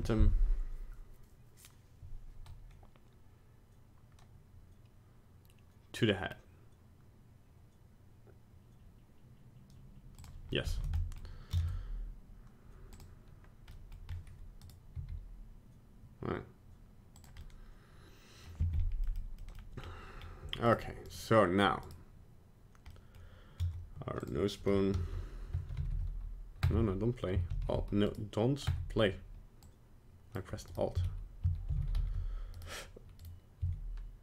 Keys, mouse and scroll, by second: 10.6 middle click, 11.0 middle click, 11.1 middle click, 11.5 ctrl+Tab, 13.7 middle click, 14.0-14.6 scroll up 1, 14.6 right click, 14.9 g, 17.4 middle click, 18.7-19.0 scroll up 1, 19.0 middle click, 19.5 middle click, 19.8 scroll down 2, 20.2-20.7 scroll up 1, 20.7 right click, 21.1 right click, 21.8 right click, 22.8 middle click, 24.1 click, 24.9 a, 25.5 space, 25.7 r, 27.5 alt+r, 27.7 alt+g, 28.1 right click, 28.7 space, 29.6 click, 30.7 right click, 31.0 a, 31.7 alt+r, 31.8 alt+g, 32.0 alt+s, 32.6 right click, 33.2 right click, 33.6 s.